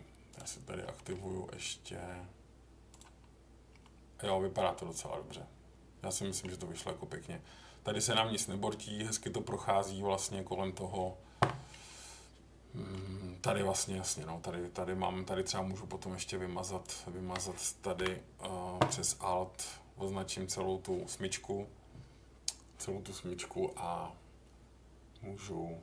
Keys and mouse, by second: 0.3 click, 0.9 middle click, 2.9 click, 3.8 middle click, 4.7-6.4 middle drag, 11.8-12.9 middle drag, 17.9 Delete.